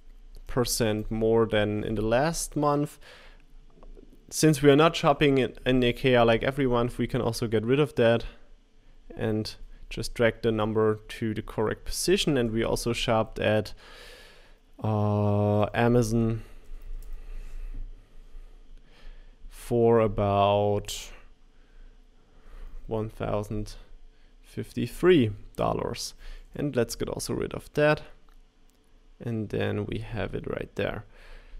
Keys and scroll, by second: 1.5 Left, 1.5 Right, 1.5 BackSpace, 15.6-16.4 typing.